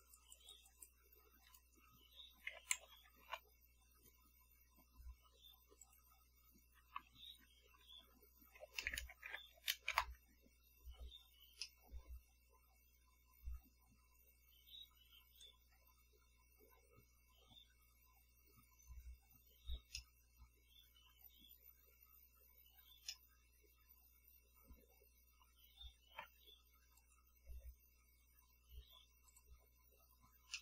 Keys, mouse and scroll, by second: 1.6 click, 2.7 0, 2.9 ., 3.1 1, 3.4 Return, 6.0 click, 7.1 Right, 7.5 Left, 7.8 Right, 8.7 0, 9.4 5, 10.1 Return, 11.8-16.1 middle drag, 20.1-21.9 middle drag, 23.2-25.7 middle drag, 27.1 click, 29.4 click.